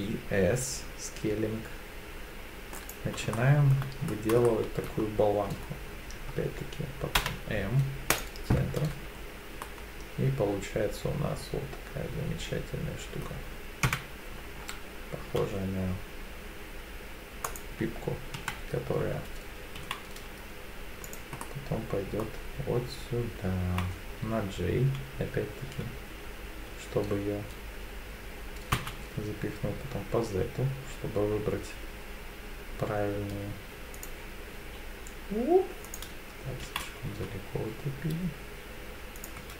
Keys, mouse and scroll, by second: 2.8 click, 3.3 shift+middle click, 4.0-4.5 scroll up 3, 4.5 shift+middle click, 7.5 m, 8.8 Tab, 9.1-9.6 scroll down 3, 9.6-13.2 middle drag, 13.8 KP_7, 14.6-15.4 scroll down 1, 15.4-16.9 scroll down 1, 15.4 s, 17.5 click, 18.4 KP_3, 19.8 g, 21.1 click, 21.4-22.2 middle drag, 23.6 g, 28.7 z, 34.0 click, 34.6 s, 35.8 click, 36.6 g, 37.1 z, 39.2 click, 39.4 Tab.